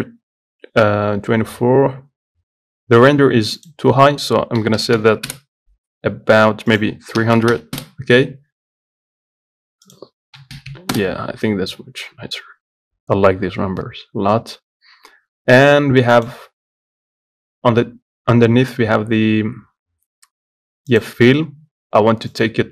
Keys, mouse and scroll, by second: 5.5-8.0 drag, 8.0 KP_0, 11.2-22.7 drag.